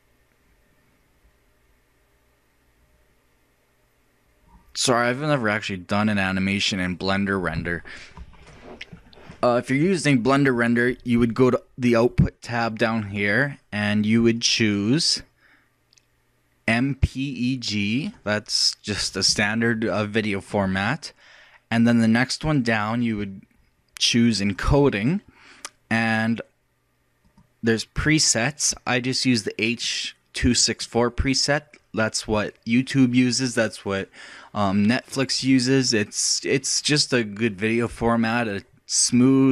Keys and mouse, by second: 5.1-6.9 drag, 14.4-16.2 drag, 24.5-26.1 drag, 26.1-27.3 middle drag, 27.3-29.2 drag.